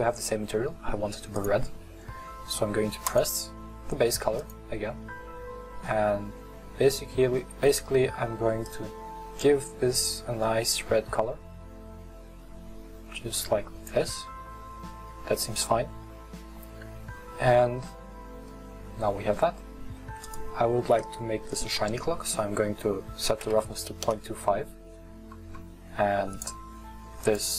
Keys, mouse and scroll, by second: 1.5 click, 15.5-24.1 middle drag, 26.3 right click.